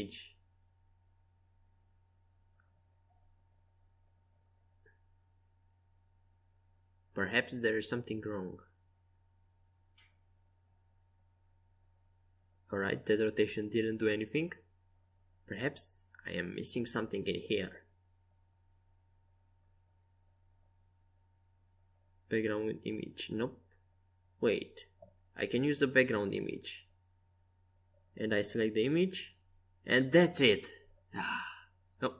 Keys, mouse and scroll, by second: 1.6 KP_3, 2.6 KP_4, 3.5 KP_6, 4.8 KP_5, 5.5 KP_5, 6.6 KP_1, 11.2 r, 13.4-15.4 right drag, 14.5 n, 16.0-16.6 scroll up 1, 19.9-30.4 drag, 30.9-32.1 middle drag.